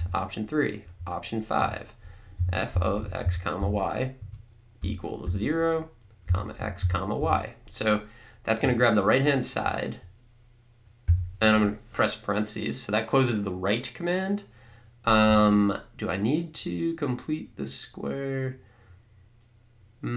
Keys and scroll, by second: 0.0 3, 0.9 5, 2.2-7.7 typing, 4.2 Right, 11.1 ).